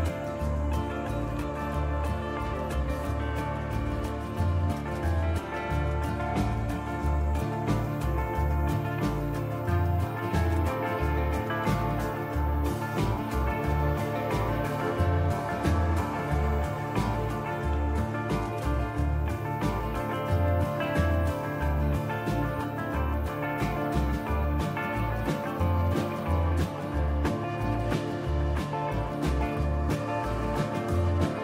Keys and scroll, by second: 1.0 typing, 5.5-6.2 typing, 9.0 typing, 10.5-11.5 typing, 17.7 typing, 19.2-20.4 typing, 23.0 typing, 24.4 typing.